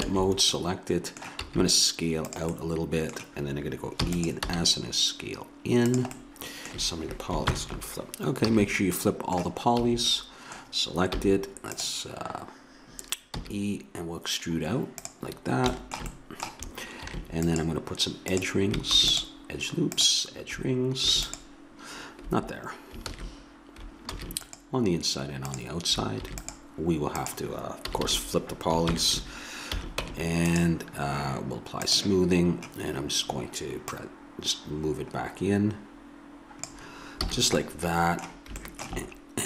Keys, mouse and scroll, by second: 0.6 a, 1.4 s, 4.0 e, 4.5 s, 6.2 click, 6.6 a, 6.8 a, 7.5 ctrl+n, 8.5 a, 9.9 a, 11.2 w, 13.5 e, 17.1 ctrl+r, 19.0 ctrl+r, 21.1 ctrl+r, 23.1 ctrl+z, 24.1 ctrl+r, 26.2 ctrl+r, 27.9 a, 28.0 a, 28.9 ctrl+n, 29.8 a, 30.1 Tab, 31.9-35.9 drag, 37.3 a, 37.7 click.